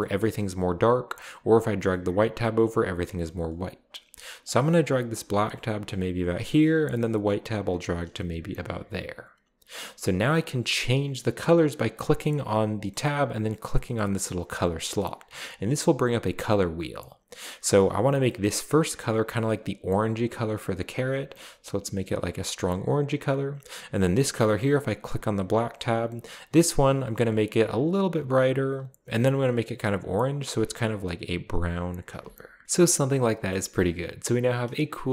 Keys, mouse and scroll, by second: 0.2 middle drag, 1.3-2.4 drag, 2.6-3.5 drag, 4.4-6.2 drag, 7.0-8.5 drag, 12.0 click, 12.3 click, 13.7-14.4 scroll down 1, 13.8 middle click, 14.5 click, 17.6-22.9 drag, 25.1 click, 25.4-25.8 drag, 26.7 click, 27.9 click, 29.4-31.7 drag, 32.6 ctrl+v, 32.6 middle click, 32.6-33.0 scroll down 1, 33.5-34.2 middle drag.